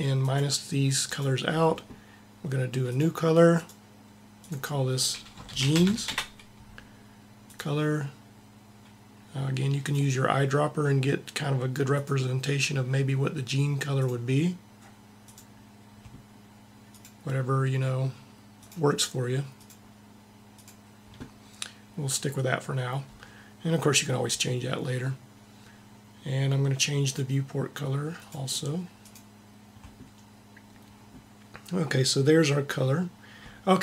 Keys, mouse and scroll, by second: 0.0-6.1 drag, 7.3-9.1 drag, 13.8-15.8 drag, 18.5-20.3 drag, 26.8-28.8 drag, 32.0-33.4 middle drag.